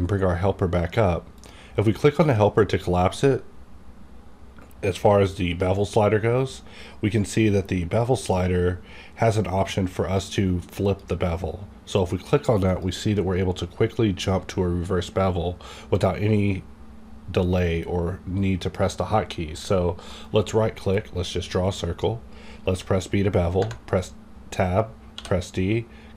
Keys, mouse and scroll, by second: 1.4 click, 10.8 click, 20.9-23.6 drag, 20.9 right click, 22.7 b, 23.6 Tab, 25.1 d.